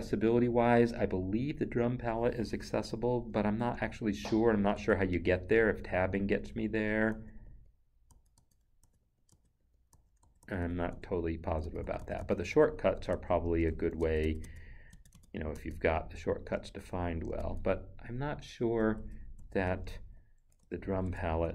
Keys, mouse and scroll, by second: 4.0 Left, 4.7 Tab, 5.8 Right, 7.1 Tab, 7.4 Right, 8.1 Tab, 9.0 Right, 9.3 Tab, 9.6 Right, 9.9 Tab, 11.1 Right, 13.1 Tab, 13.5 Right, 14.0 Tab, 16.3 Right, 17.4 Tab, 19.0 shift+Tab, 19.9 Left, 20.6 shift+Tab.